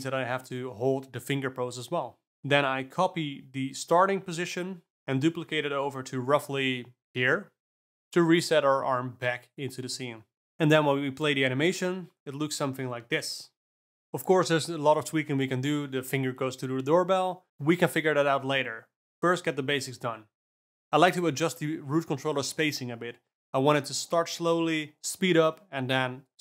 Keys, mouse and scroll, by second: 2.2 click, 2.4 shift+d, 4.2-6.2 drag, 6.4 shift+d, 9.0 shift+Down, 9.7 shift+Down, 10.1 shift+Down, 10.4 shift+Down, 10.6 shift+Left, 10.9 space, 11.8 d, 15.2 space, 15.4 shift+Left, 15.8 space, 18.9 space, 19.3 Left, 19.7 Left, 19.9 Left, 20.2 Left, 20.3 shift+F6, 20.4 alt+a, 20.8 click, 22.3 s, 24.4 click, 24.7 r.